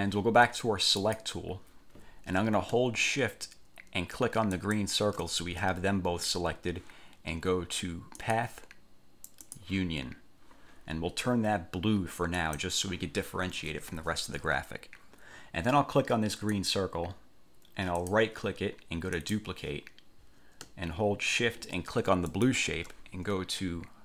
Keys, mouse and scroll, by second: 1.2 click, 4.7 shift+click, 8.4 click, 9.6 click, 12.5 click, 16.7 click, 18.1 click, 19.3 click, 22.5 shift+click.